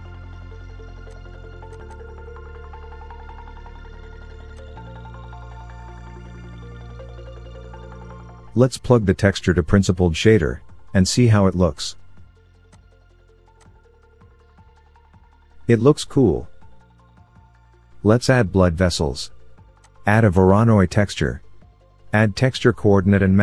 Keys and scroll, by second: 10.4 Delete, 18.8 shift+a, 22.2 ctrl+t.